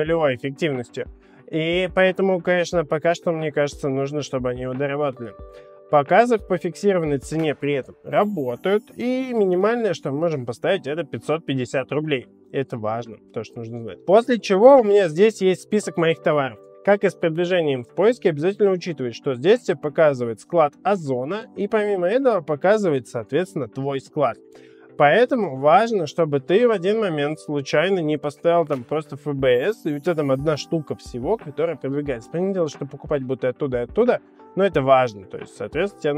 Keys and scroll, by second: 8.7-9.6 typing.